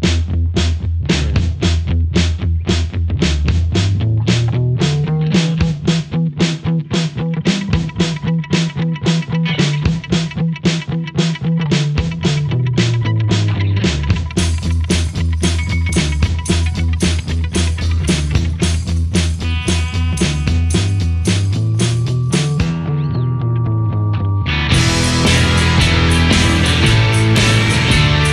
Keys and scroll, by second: 0.5 ctrl+z, 1.4 scroll down 1, 1.5 space, 3.1 space, 7.5 space, 7.6 scroll up 1, 12.4 ctrl+z, 16.2 space, 16.7 ctrl+z, 16.8 space, 16.9 ctrl+z, 17.2 space, 18.8-22.3 typing, 19.8 ctrl+z, 23.7 space, 24.1 space, 24.3 space, 25.4 space, 25.7 space, 25.9 space, 27.0 ctrl+z, 27.8 ctrl+z, 28.1-28.3 typing.